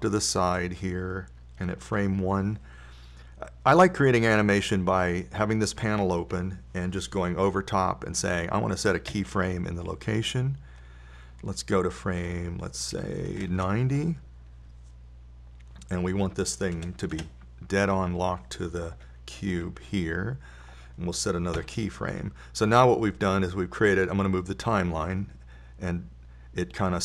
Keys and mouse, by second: 10.5 i, 13.6-15.7 drag, 17.3-19.9 drag, 23.0 i, 24.7-27.0 drag.